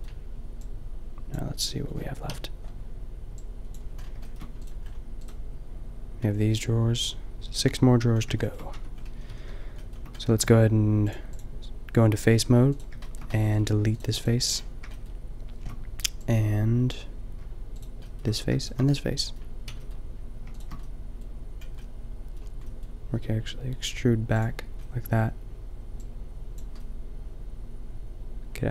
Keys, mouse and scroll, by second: 2.2 KP_5, 5.5-7.7 middle drag, 8.8 Tab, 9.2 a, 9.3 a, 9.4 a, 12.1 a, 13.0-15.3 middle drag, 18.1 middle click, 19.2 click, 19.6 b, 20.5 click, 20.9-22.3 drag, 23.1 e.